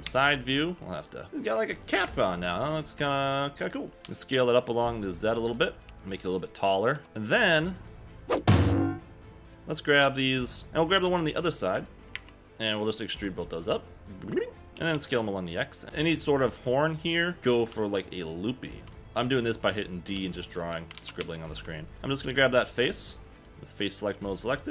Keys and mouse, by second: 0.0 KP_3, 0.6 g, 1.0 click, 1.2 Tab, 2.0 KP_1, 2.9 Tab, 3.9 s, 4.0 z, 5.7 click, 5.8 g, 6.1 click, 6.9 Tab, 7.1 Tab, 9.5 g, 10.0 3, 10.4 click, 10.6 Escape, 10.6 g, 10.6 KP_1, 11.0 shift+middle click, 12.1 KP_1, 13.1 e, 14.3 click, 14.7 Escape, 14.7 s, 14.7 x, 14.9 x, 17.7-18.8 d, 20.1 d, 20.7 d, 20.9 ctrl+z, 21.2 ctrl+z, 23.8 click, 24.3 click.